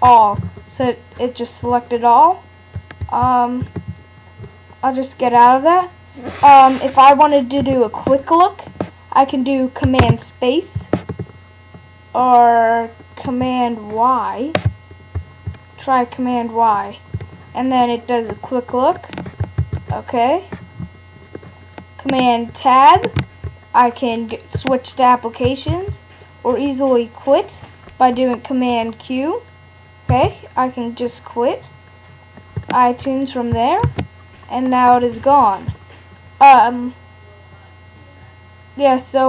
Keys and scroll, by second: 3.0 super+a, 15.1 super+y, 19.6 super+w, 23.1 super+Tab, 24.1 super+Right, 25.7 super+Tab, 26.5 super+Right, 27.5 super+Left, 27.9 super+Right, 30.1 super+q, 33.8 super+Tab, 34.3 super+Right.